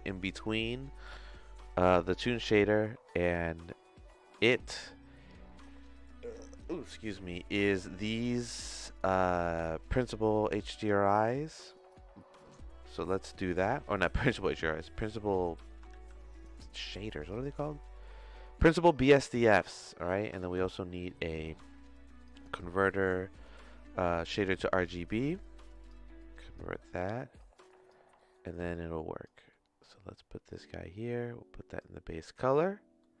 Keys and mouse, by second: 1.0 middle click, 3.2 middle click, 8.7 click, 11.6 middle click, 12.9 middle click, 13.7 click, 14.6 middle click, 15.5 middle click, 15.9 shift+a, 20.2 middle click, 20.4 shift+a, 25.2 click, 26.3 click, 26.9 middle click, 27.5 click, 28.3 middle click, 28.7 click, 29.6 middle click, 30.5-31.8 drag, 32.5 middle click.